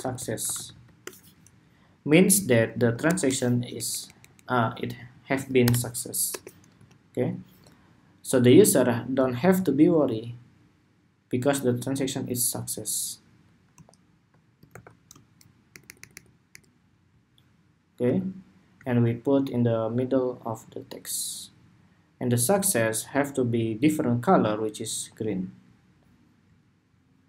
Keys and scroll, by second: 1.4 Escape, 14.4 super+g, 15.9 alt+Right.